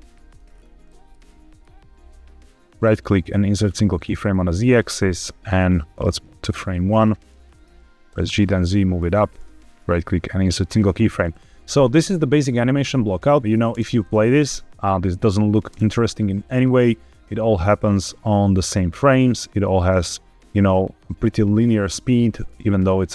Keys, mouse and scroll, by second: 0.0 shift+middle click, 0.4-0.9 scroll up 3, 0.7-1.6 middle drag, 2.7-3.7 right drag, 4.2-5.3 middle drag, 5.3-5.7 drag, 6.4 click, 7.3-8.0 scroll down 3, 8.0 g, 8.1 z, 8.9 click, 9.6-10.7 right drag, 11.3-11.7 middle drag, 13.4 click, 13.4 space, 13.6 space, 15.8 space, 17.6-19.3 drag, 22.4-23.1 scroll up 4.